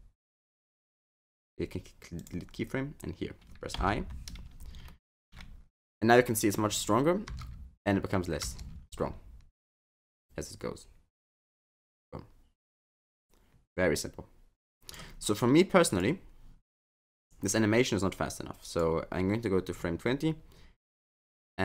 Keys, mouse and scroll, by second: 1.2 right click, 3.8 i, 4.9 middle click, 6.6-7.3 scroll down 6, 7.3 space, 8.5 space, 8.7 scroll up 7, 9.8 click, 15.9 click, 18.3 click, 19.7-21.6 scroll down 8.